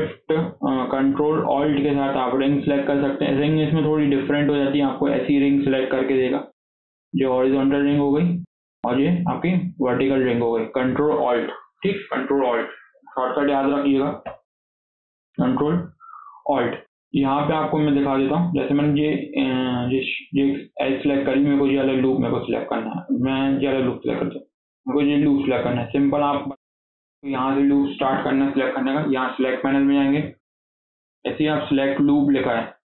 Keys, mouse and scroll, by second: 2.7 ctrl+alt+click, 6.0-7.0 middle drag, 7.0-7.4 scroll up 2, 7.4-9.3 middle drag, 9.3 ctrl+alt+click, 10.1-13.1 middle drag, 13.3 scroll down 4, 13.5 middle click, 14.1 KP_7, 14.8 scroll up 1, 15.1 shift+middle click, 15.4-18.5 scroll down 2, 19.3 click, 20.2 scroll up 2, 20.5-23.5 shift+middle drag, 23.5 click, 29.3-32.4 drag.